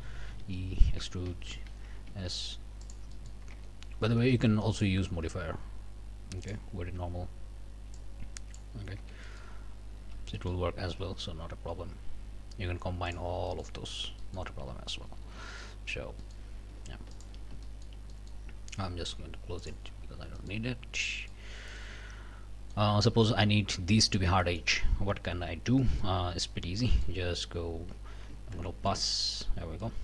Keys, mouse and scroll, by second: 0.3 e, 1.5 Escape, 2.1 s, 2.8 click, 3.5 Tab, 4.7 click, 6.4 click, 7.9 click, 9.0 Tab, 9.2-9.6 scroll up 1, 10.0 a, 10.3 click, 10.8 q, 13.1 click, 13.5 click, 14.2 click, 14.6 scroll down 1, 15.0 a, 15.4 click, 15.9 scroll up 1, 16.2 click, 17.1 alt+click, 17.6 alt+shift+click, 18.1 alt+shift+click, 19.6 middle click, 20.1 scroll down 1, 20.4 middle click, 20.7-21.0 scroll up 1, 21.1 middle click, 21.8-22.9 middle drag, 23.1 middle click, 24.4 middle click, 25.8 middle click, 26.8 middle click, 27.3 2, 28.7 ctrl+KP_Add, 29.8 middle click.